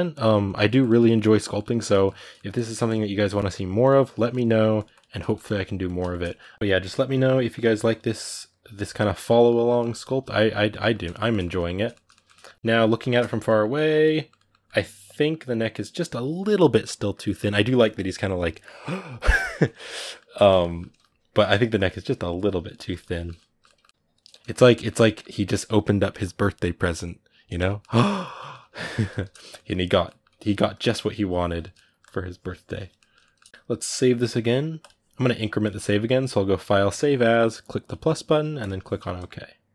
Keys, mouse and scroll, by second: 1.0-2.7 middle drag, 2.7 click, 3.1 middle click, 3.6 click, 3.8 ctrl+middle click, 4.5 click, 5.0-6.5 ctrl+middle drag, 6.5 click, 7.0 middle click, 7.6 click, 7.8 middle click, 8.2 click, 9.1 ctrl+middle click, 9.8 click, 10.6-12.4 ctrl+middle drag, 12.4 click, 12.5-21.5 ctrl+middle drag, 21.5-22.9 drag, 22.9 ctrl+middle click, 23.9 click, 24.1-30.5 ctrl+middle drag, 30.5-31.5 drag, 31.5 ctrl+middle click, 31.8 click, 32.7 shift+middle click, 33.5-36.4 drag, 39.2 middle click.